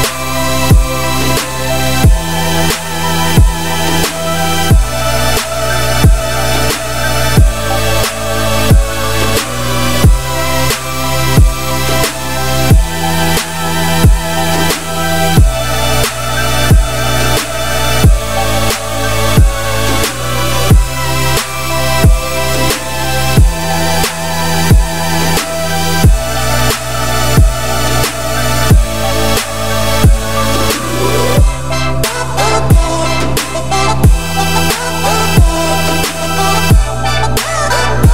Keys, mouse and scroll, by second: 0.3 shift+middle click, 1.0-4.9 drag, 4.9 scroll down 4, 5.0-6.5 middle drag, 6.5-7.3 scroll up 3, 7.3-8.5 scroll up 1, 8.5-9.8 drag, 11.9-12.9 drag, 13.2 click, 15.4 click, 16.2 click, 16.7 click, 16.9 scroll down 1, 17.0-17.7 middle drag, 17.7 ctrl+s, 18.0-20.0 middle drag, 20.0-20.5 scroll up 5, 20.5 click, 20.7 Tab, 21.0-22.1 middle drag, 22.1-22.5 scroll down 1, 24.2 scroll down 2, 24.4 middle click, 25.2 Tab, 25.3 scroll down 1, 25.4-26.4 middle drag, 26.4 click, 26.7 scroll down 1, 26.8-28.7 middle drag, 28.7-29.1 scroll up 4, 29.1 middle drag, 29.3-30.4 scroll up 4, 29.7 click, 29.9 Tab, 30.4 a, 30.7 `, 31.6 `, 32.3 s, 35.3-36.2 scroll up 7, 36.2-37.7 scroll down 3.